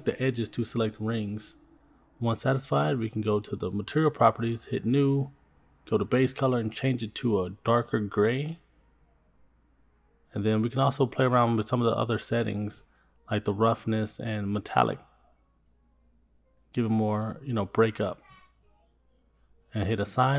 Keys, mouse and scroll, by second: 0.1 shift+click, 0.1 shift+click, 0.4 scroll down 2, 0.5-2.1 middle drag, 2.2 scroll down 1, 2.8-3.2 scroll down 2, 4.4 click, 6.4 click, 14.3-16.0 drag, 17.0-18.1 drag, 20.3 click.